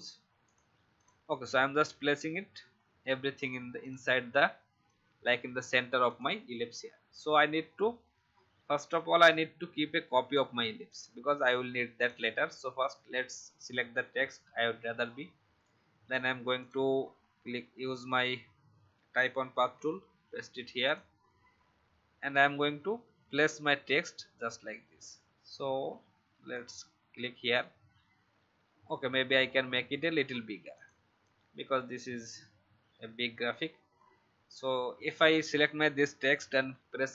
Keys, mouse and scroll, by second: 4.8 alt+shift+click, 9.1 alt+click, 10.9 click, 14.3 ctrl+x, 15.6-16.6 drag, 19.5 ctrl+v, 20.8-25.8 drag, 29.2-29.5 shift+scroll up 1, 30.7 click, 36.6 i.